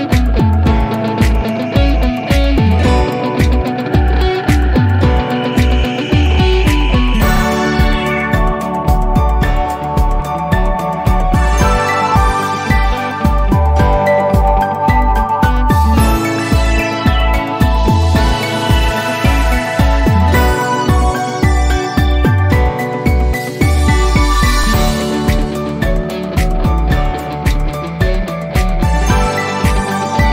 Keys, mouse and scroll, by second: 2.7 right click, 5.7 click, 13.0-17.0 drag, 17.0 alt+middle click, 22.7-23.0 scroll down 1, 24.4 scroll up 1, 26.5-27.5 scroll up 1, 28.9-29.9 alt+middle click, 29.9-30.3 scroll down 1.